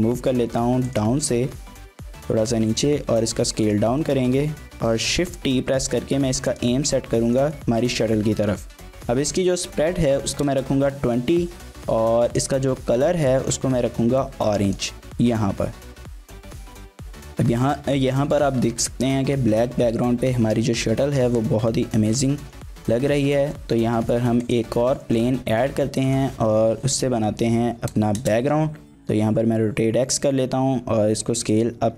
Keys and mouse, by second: 0.9 click, 1.4 s, 3.6 click, 4.0 middle drag, 5.7 shift+t, 6.5 click, 7.2 shift+click, 7.5-7.8 drag, 8.9-11.3 drag, 12.3 click, 17.3 click, 22.8 drag, 23.1 shift+a, 25.1 click, 25.3 g, 25.5 y, 26.1 click, 26.4 r, 27.5 x, 27.7 KP_9, 28.2 KP_Enter, 28.2 KP_0, 29.5 s, 31.6 click.